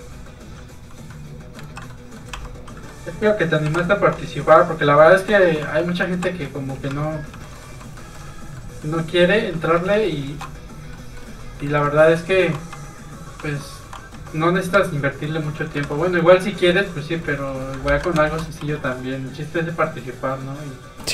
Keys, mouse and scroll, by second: 0.4 click, 1.1 middle click, 1.7 ctrl+z, 1.9 middle click, 2.4 ctrl+q, 2.6 click, 2.9 middle click, 3.7 2, 4.0 alt+click, 4.3 alt+x, 4.8 click, 5.3 x, 5.4 click, 5.5 alt+click, 5.9 alt+click, 6.2 alt+x, 6.3 click, 6.5 middle click, 6.8 a, 7.2 scroll down 1, 7.5 shift+middle click, 7.7 middle click, 7.8 shift+middle click, 8.0 shift+middle click, 8.3-8.9 shift+scroll up 2, 8.6 middle click, 9.8 middle click, 10.0 shift+middle click, 10.4 shift+b, 10.5 click, 11.0 middle click, 11.7 shift+middle click, 11.9 middle click, 12.0 middle click, 12.4 alt+click, 12.7 alt+x, 12.9 click, 13.5 alt+click, 13.9 alt+click, 14.2 alt+x, 14.8-15.3 scroll down 1, 14.8 a, 15.3 middle click, 15.6 shift+middle click, 15.9 alt+a, 16.2 middle click, 16.3 shift+middle click, 16.7 shift+middle click, 17.5 middle click, 17.6 middle click, 17.9 ctrl+Tab, 18.3 shift+middle click, 20.1 middle click, 20.6-21.1 scroll down 1.